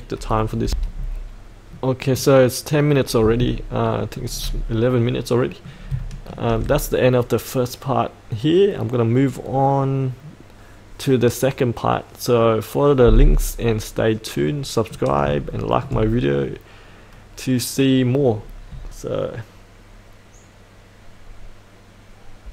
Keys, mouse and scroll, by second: 0.6 F8, 1.7 middle click, 3.9 shift+middle click, 4.6-5.1 scroll down 1, 5.1 middle click, 6.0 shift+middle click, 14.4 middle click, 15.5 shift+middle click, 16.4-18.7 middle drag.